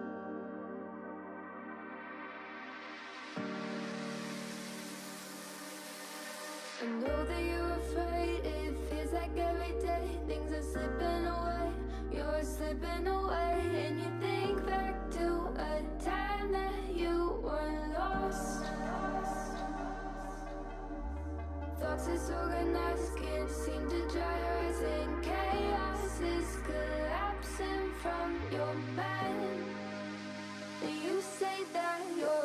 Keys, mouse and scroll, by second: 0.5 scroll down 1, 0.6-2.3 shift+middle drag, 2.3 click, 2.8 middle click, 3.1 Tab, 3.4 KP_1, 3.7-4.2 scroll up 5, 3.9 shift+middle click, 4.2 alt+z, 4.4-4.9 shift+middle drag, 4.9-5.5 drag, 6.1 3, 6.4 shift+middle click, 6.8-7.7 scroll up 2, 7.7 shift+d, 10.9 alt+z, 11.1 scroll down 2, 11.3-12.7 middle drag, 12.7 alt+e, 15.6 KP_1, 15.8 alt+z, 16.0-16.8 scroll up 4, 16.2 shift+middle click, 16.8 alt+e, 19.5 ctrl+l, 19.9 alt+z, 20.1-20.7 scroll down 4, 20.7 g, 22.0 click, 22.3 middle click, 22.7 scroll down 4, 22.9 shift+middle click, 23.5-24.0 scroll up 5, 24.0 scroll down 1, 24.2-25.6 middle drag, 25.6-26.0 scroll down 1, 26.0 ctrl+z, 26.2 ctrl+z, 26.6 KP_1, 27.1 alt+z, 27.7 ctrl+z, 28.1-28.7 shift+middle drag, 28.7 KP_3, 29.5 shift+click, 30.2 shift+middle click, 30.6 2, 31.2 shift+click, 32.1 click.